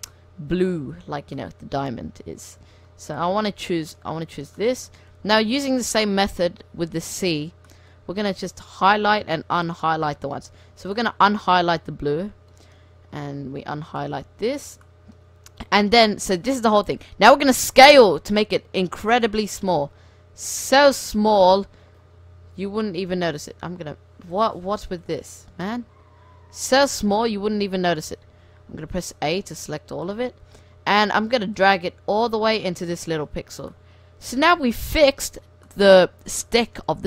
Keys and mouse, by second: 0.0 right click, 0.1-1.6 middle drag, 1.0 c, 1.6 right click, 4.5 right click, 4.6 middle click, 4.7-6.5 middle drag, 5.3 c, 7.2-9.0 drag, 8.0 c, 9.0 middle click, 10.8 c, 12.8 middle drag, 13.1 click, 13.2 middle click, 13.5 c, 14.6 right click, 15.0 middle click, 15.2-15.6 middle drag, 16.5-17.5 middle drag, 17.5 s, 20.1 s, 23.4-24.6 drag, 24.6-25.2 right drag, 24.6 c, 25.9 g, 28.3 a, 28.9 a, 29.4 s, 31.1 s, 31.9 g, 33.5 Tab, 34.5-34.9 middle drag.